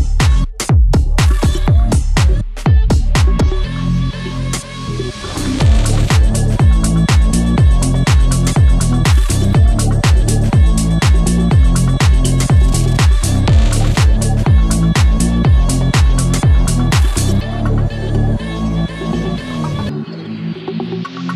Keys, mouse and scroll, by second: 2.5-3.8 drag, 5.1 click, 8.2-9.9 drag, 11.9 click, 14.4-18.5 drag, 18.5 click.